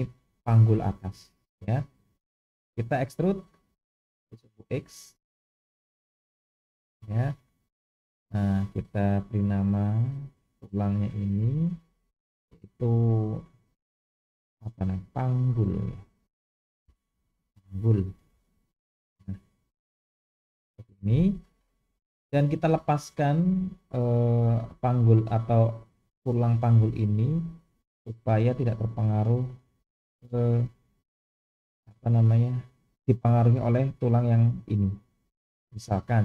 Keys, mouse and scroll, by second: 3.5 e, 7.2-8.4 scroll up 2, 8.6 click, 10.5 drag, 11.3-19.2 drag, 17.4 g, 32.8-33.5 scroll down 1, 33.5 scroll down 1, 35.9-36.2 drag.